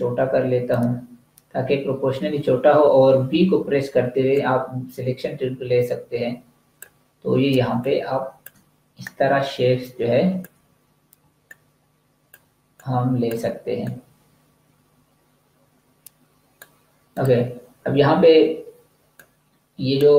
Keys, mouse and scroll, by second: 3.5 v, 4.3 click, 7.5 space, 7.7 click, 8.1 space, 8.9 click, 11.3 shift+click, 12.7 click.